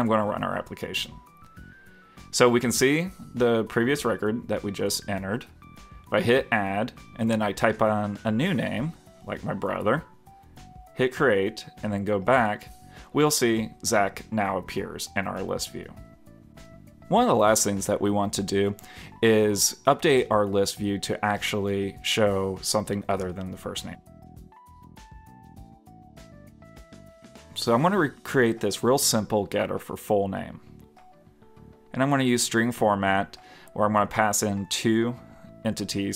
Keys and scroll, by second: 0.4 super+Tab.